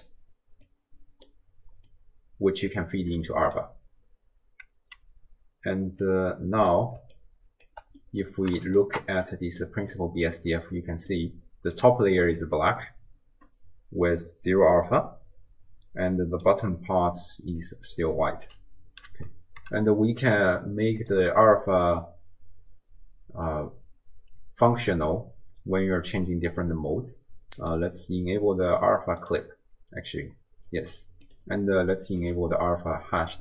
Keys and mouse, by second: 0.7-1.3 drag, 2.0-2.8 drag, 3.3 middle click, 6.0-6.8 drag, 7.0 d, 7.2 click, 7.7 d, 7.8 d, 7.8 d, 8.0 middle click, 8.2 click, 8.2 middle click, 8.3 click, 9.0 ctrl+shift+click, 9.3 click, 10.0 middle click, 10.1 click, 11.3 click, 11.3 middle click, 16.2 click, 16.2 middle click, 21.0 click, 21.9-28.0 drag, 28.7-29.4 drag, 31.3-32.4 drag.